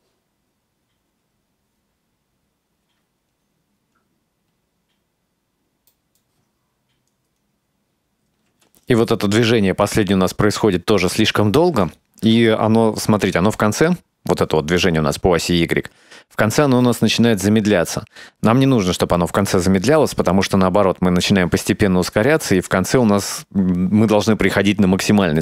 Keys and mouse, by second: 8.6 space, 9.9-11.5 drag, 12.0 shift+middle click, 12.7 ctrl+middle click, 13.7 drag, 14.8 right click, 15.5-18.6 drag, 19.3 shift+middle click, 22.7 right click.